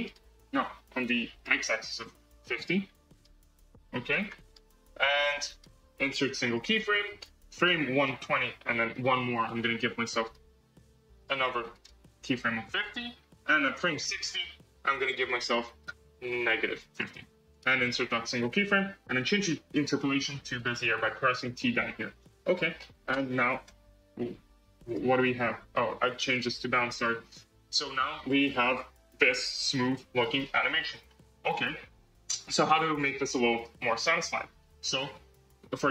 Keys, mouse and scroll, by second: 1.2-3.2 drag, 3.3-4.5 drag, 5.4-7.9 right drag, 7.9 click, 8.8 Right, 10.1-11.2 drag, 11.6-14.0 right drag, 14.0-17.0 drag, 17.4-19.4 right drag, 19.4 t, 21.4 t, 23.0 space, 23.6 space, 24.0 space, 24.8-25.3 drag, 25.3 space, 26.2 t, 27.4 space, 30.1-31.0 scroll up 6, 33.5 space, 34.0-35.9 drag.